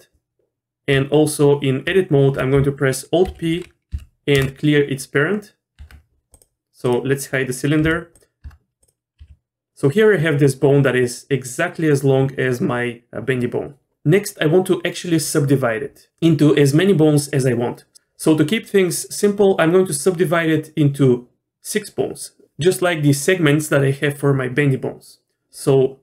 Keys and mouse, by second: 0.5 Tab, 0.9 Tab, 3.2 alt+p, 5.8 Tab, 6.3 click, 6.8 click, 7.8 h, 8.4 Tab, 9.2 g.